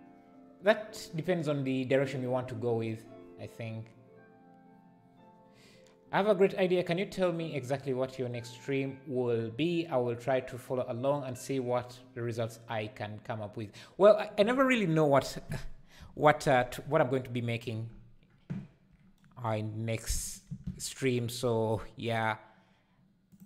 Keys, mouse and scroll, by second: 20.3 shift+right click, 20.5 shift+a.